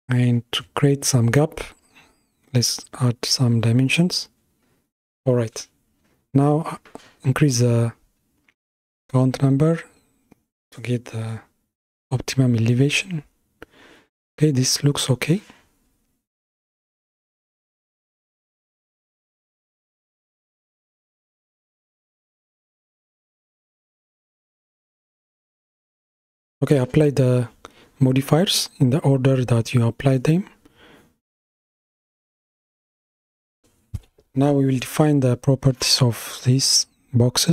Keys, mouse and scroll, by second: 2.7-4.0 drag, 4.0-6.8 middle drag, 6.8-10.7 drag, 10.7-11.6 scroll down 5, 11.7-14.2 middle drag, 14.2-17.2 scroll up 13, 17.2 scroll up 1, 17.3 KP_7, 18.8-21.3 middle drag, 21.3 click, 23.4 ctrl+a, 24.6 ctrl+a, 25.4 ctrl+a, 26.8-29.9 middle drag, 33.2 Tab, 34.4 p.